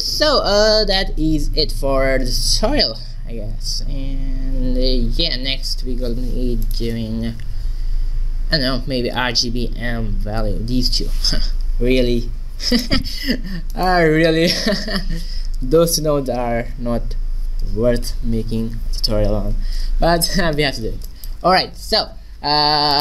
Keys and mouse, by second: 5.3 shift+a, 20.8-23.0 middle drag.